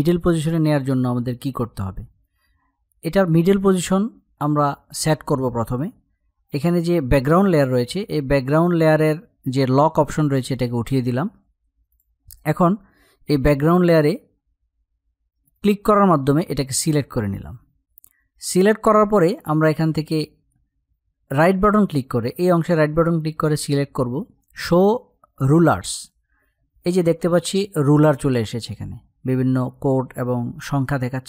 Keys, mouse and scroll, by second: 9.7 click, 15.2 click, 18.9 click, 19.5 right click, 25.6 click.